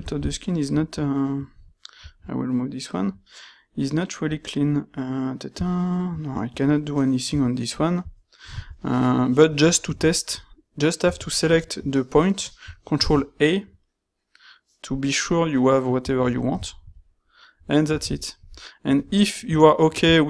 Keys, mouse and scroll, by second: 13.0 ctrl+a, 18.1 ctrl+middle click, 18.5 middle click, 19.5 ctrl+middle click, 19.9 ctrl+middle click.